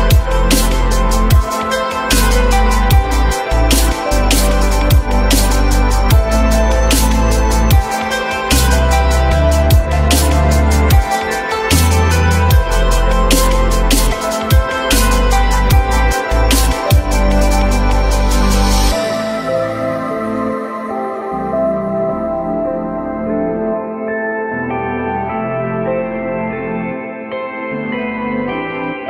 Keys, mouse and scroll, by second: 15.5 F3, 16.1 ctrl+click, 16.8 ctrl+click, 17.4 ctrl+click, 21.2 F3.